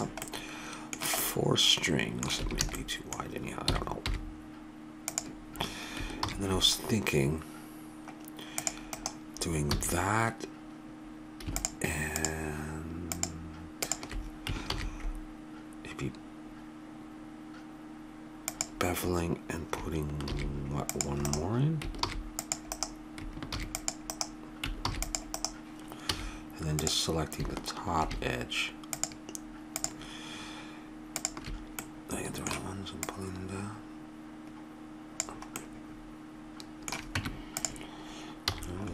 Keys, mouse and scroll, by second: 0.5 middle click, 2.4 a, 2.6 a, 3.7 s, 6.2 ctrl+r, 9.7 a, 11.6-15.0 drag, 14.7 ctrl+b, 20.3 ctrl+r, 22.0 ctrl+r, 23.5 ctrl+r, 24.8 ctrl+r, 26.1 a, 26.8-28.6 drag, 28.9-31.8 drag, 31.8-33.4 middle drag, 33.4-34.8 drag, 35.6-37.4 middle drag, 37.2 Tab, 38.5 a, 38.6 middle click, 38.8 middle click.